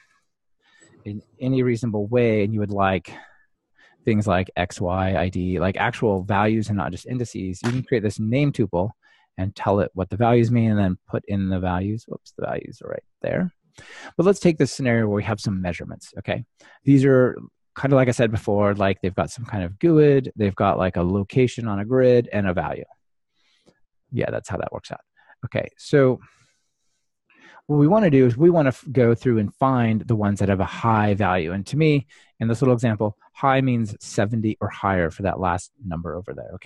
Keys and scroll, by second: 0.5 Return.